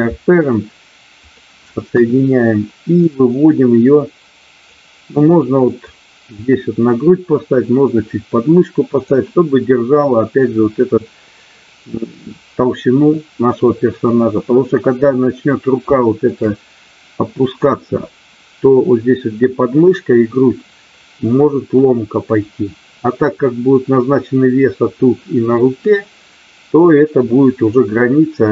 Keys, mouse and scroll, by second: 1.9 KP_1, 3.2-4.7 drag, 5.8-9.0 drag, 15.9 shift+middle click.